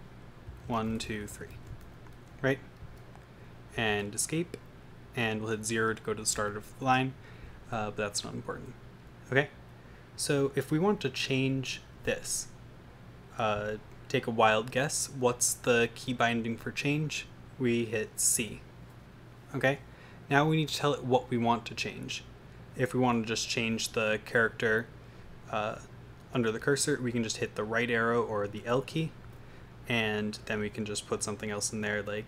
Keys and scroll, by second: 0.0-2.1 typing, 4.4 Escape, 6.9 0, 8.4 Right, 10.1 Left, 18.4 c, 29.2 |.